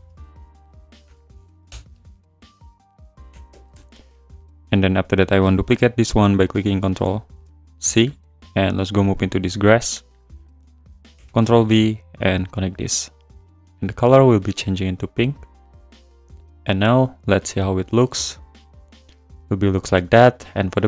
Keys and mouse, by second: 4.4 z, 4.7 click, 7.1 ctrl+c, 7.5 click, 9.9 click, 10.5 click, 11.1 ctrl+v, 11.8 click, 12.9 click, 14.2 click.